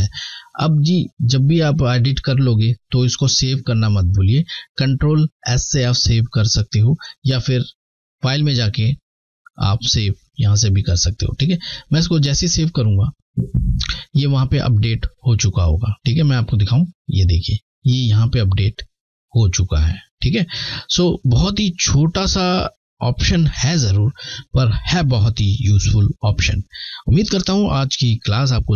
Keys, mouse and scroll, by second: 7.1 click, 7.1 click, 11.4 click, 15.6 click, 20.3 click, 23.1 alt+scroll down 1.